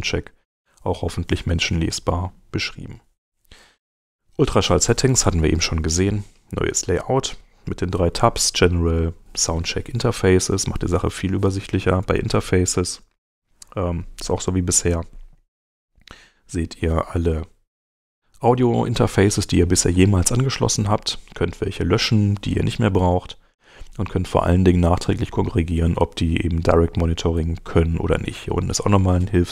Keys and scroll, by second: 12.2 super+Tab, 14.9 shift+,.